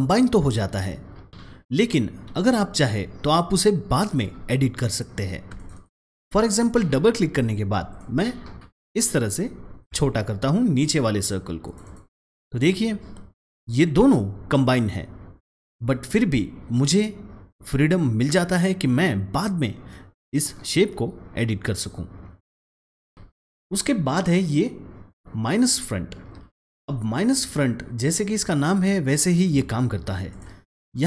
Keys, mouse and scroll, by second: 5.5 click, 5.7 double click, 6.6 click, 7.9 click, 8.0-11.6 shift+drag, 11.6 click, 11.7 double click, 13.7-14.1 drag, 22.8 click, 23.2 ctrl+z, 30.2 click, 30.3-31.0 drag, 30.9-31.0 drag.